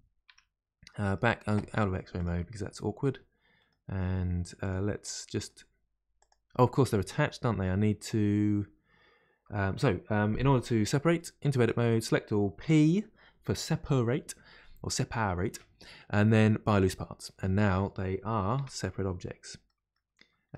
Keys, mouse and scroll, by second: 0.3 Tab, 0.9-2.1 middle drag, 2.1 click, 2.7 middle click, 3.5-4.6 scroll up 2, 4.6 click, 5.0-6.1 middle drag, 6.1 click, 11.4 Tab, 11.7 a, 18.5 Tab, 19.7-20.5 middle drag.